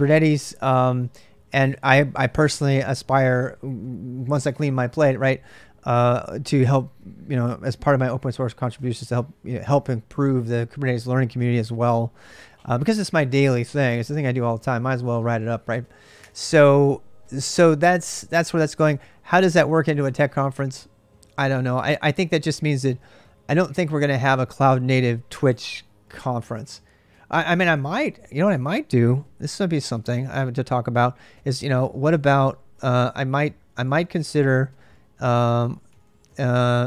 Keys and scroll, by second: 15.3 BackSpace, 15.5 BackSpace, 15.6 BackSpace, 16.0 BackSpace, 27.5 typing, 29.3 Return, 29.5-30.0 typing, 31.5-36.8 typing.